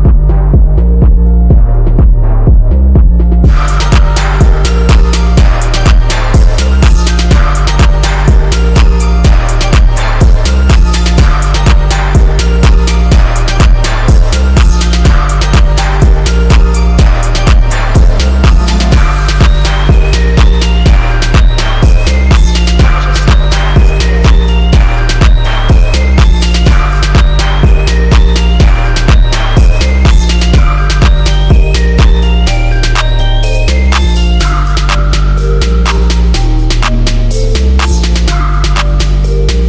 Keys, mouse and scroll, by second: 15.2 scroll down 1, 16.5 click, 17.7-22.9 drag, 22.9-27.6 drag.